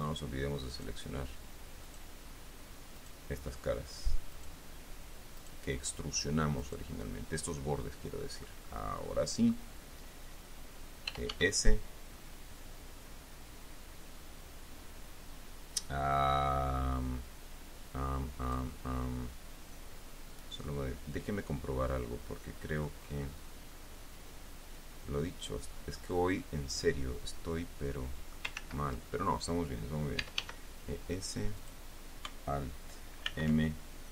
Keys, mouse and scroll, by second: 1.0 shift+right click, 2.2 shift+right click, 3.3 shift+right click, 4.6 shift+right click, 5.7 shift+right click, 6.9 shift+right click, 7.9-9.0 shift+middle drag, 9.3 middle click, 11.4 e, 11.6 s, 18.8-21.2 drag, 22.2-23.4 middle drag, 23.6 scroll up 1, 25.1-26.6 drag, 26.7-28.8 middle drag, 28.8 ctrl+click, 28.9 ctrl+z, 30.5 e, 30.7 s, 31.9 click, 33.6 alt+m.